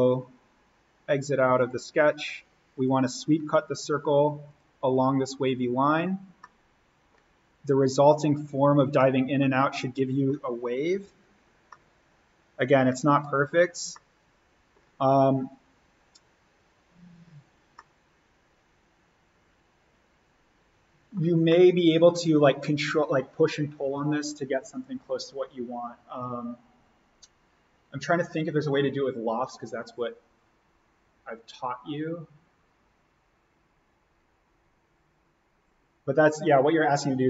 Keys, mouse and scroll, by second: 1.5 click, 6.3 scroll up 1, 6.4-7.7 middle drag, 7.7 click, 8.9 middle click, 9.3 scroll, 10.9 alt+v, 11.2-11.7 scroll up 1, 11.7-13.1 middle drag, 13.1-13.9 scroll down 1, 13.9-17.0 middle drag, 17.0-17.7 scroll up 1, 17.7-22.2 middle drag, 22.2-23.2 scroll up 1.